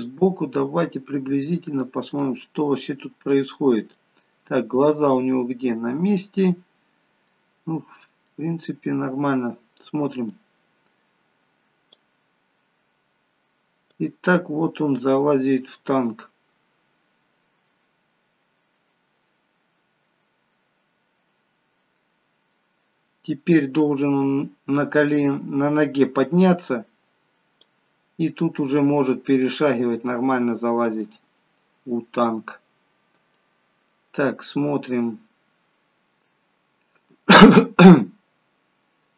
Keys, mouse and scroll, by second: 2.4 middle click, 3.5-4.0 scroll up 5, 4.0 middle click, 7.5-8.2 scroll down 1, 8.2 middle click, 8.2-9.7 scroll down 2, 10.6 click, 12.3-13.2 scroll down 2, 13.2 scroll down 1, 14.3 click, 28.1-28.7 scroll up 4, 28.7 middle click, 31.6 middle click, 34.0 middle click.